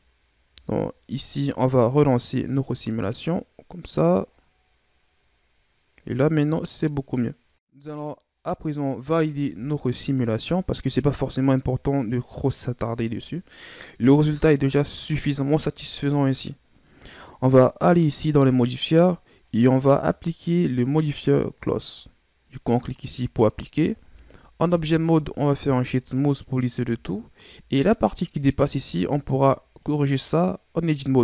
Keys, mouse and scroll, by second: 1.2-2.5 scroll up 2, 2.5-5.6 drag, 7.5-8.1 scroll up 4, 8.1 scroll down 1, 8.3-9.4 middle drag, 9.4 KP_1, 17.8 click, 19.4-24.6 drag, 24.6 w, 27.1-27.6 scroll up 1, 28.8 Tab, 29.7 right click.